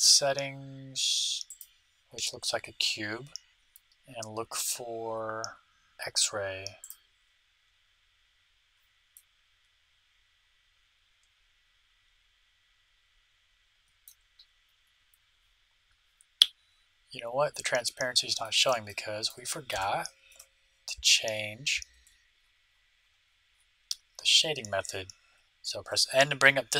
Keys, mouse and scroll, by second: 1.4-3.1 drag, 4.9-7.5 middle drag, 6.8-8.5 drag, 8.6 click, 9.1-11.0 middle drag, 18.4-21.4 middle drag, 20.2 n, 22.0-25.5 middle drag.